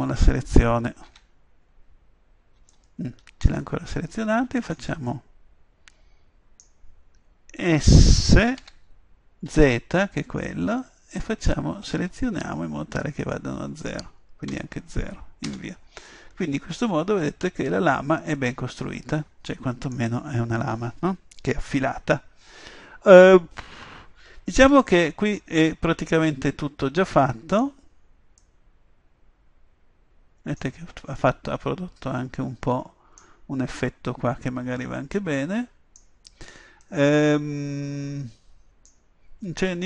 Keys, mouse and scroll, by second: 1.1 Tab, 8.6 s, 16.1-17.3 middle drag, 18.2-25.9 middle drag, 24.8 Tab, 28.0-30.5 middle drag, 31.2-33.2 middle drag, 34.4-38.8 middle drag.